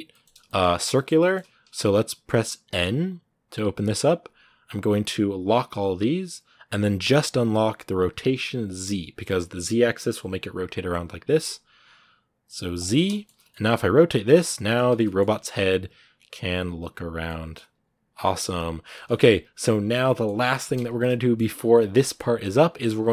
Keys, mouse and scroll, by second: 0.6 scroll down 1, 0.7-2.5 middle drag, 2.5 n, 5.2-12.9 drag, 12.9 shift+middle click, 13.2 scroll down 1, 13.3 middle click, 13.5 r, 14.8 middle click, 15.0 scroll down 1, 15.1 middle click, 15.4 r, 17.0 middle click, 17.5 r, 18.7 middle click, 19.0 r, 19.8-22.0 middle drag, 22.0 scroll up 1, 22.2 r, 22.8 scroll down 2, 22.9-23.1 middle drag.